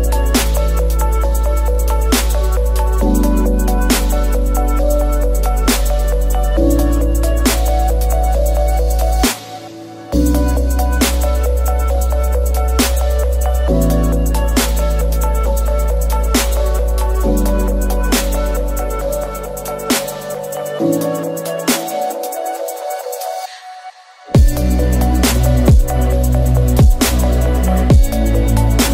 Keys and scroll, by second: 13.0 ctrl+z, 23.5 Delete, 26.6 ctrl+c.